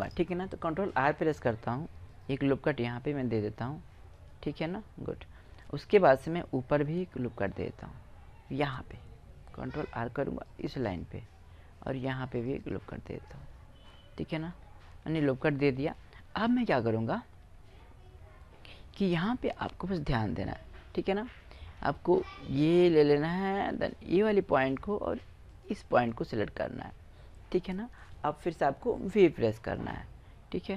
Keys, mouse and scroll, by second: 1.1 ctrl+r, 4.0-5.9 drag, 5.9-8.7 middle drag, 9.4 ctrl+r, 11.6 ctrl+r, 14.0 middle click, 16.8-20.6 middle drag, 20.7-22.2 middle drag, 22.5-24.3 drag, 26.0 click, 26.1-28.7 middle drag, 28.9 v, 30.6-30.7 drag.